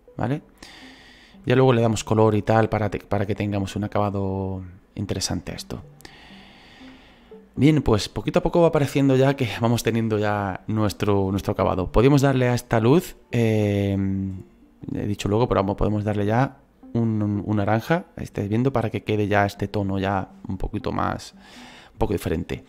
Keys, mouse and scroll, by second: 3.2-5.6 drag, 5.6-12.1 middle drag, 15.7 click.